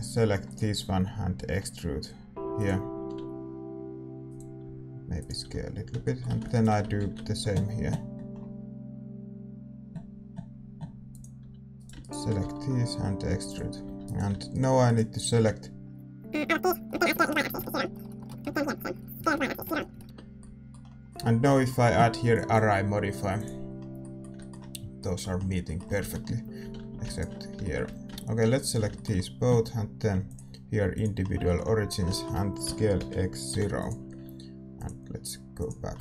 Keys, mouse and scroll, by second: 0.4 e, 1.4 g, 3.0 r, 4.6 s, 5.4 a, 6.0-8.1 middle drag, 6.5-8.5 right drag, 6.9 ctrl+b, 11.3 a, 11.7-13.8 right drag, 12.4 e, 13.8 a, 14.0-17.5 right drag, 16.9 middle click, 17.1 s, 18.2 middle click, 18.3-19.6 right drag, 18.3 a, 19.1 s, 19.9-23.4 middle drag, 19.9 a, 20.0 Tab, 23.4-26.0 drag, 23.7-31.0 middle drag, 26.0 Tab, 26.6 a, 26.7 a, 27.0-30.9 right drag, 30.9-32.1 drag, 31.4-33.7 middle drag, 32.6 s, 35.6-36.0 drag.